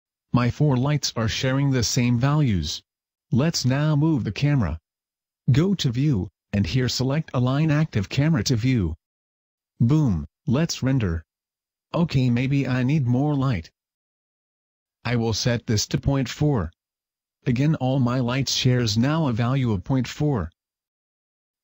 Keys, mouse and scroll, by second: 2.2 middle click, 2.7-3.3 scroll up 2, 3.3 shift+middle click, 3.8 middle click, 5.5 click, 12.4 Escape, 15.9 click, 18.4 click.